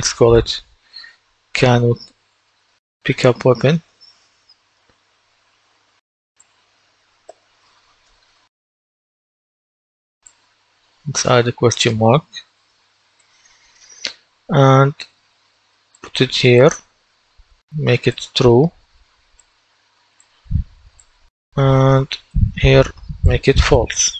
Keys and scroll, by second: 1.8-7.7 typing, 7.9 Return, 22.0 ctrl+d.